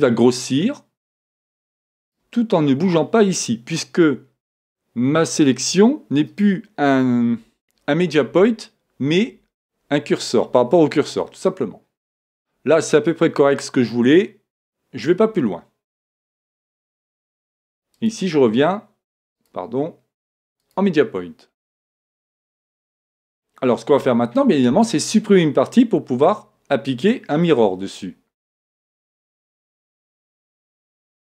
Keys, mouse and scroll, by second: 2.1-4.1 drag, 16.7 a, 18.0-21.3 drag, 22.0-25.5 middle drag, 24.3 scroll up 1, 28.8 Tab, 29.4 Tab.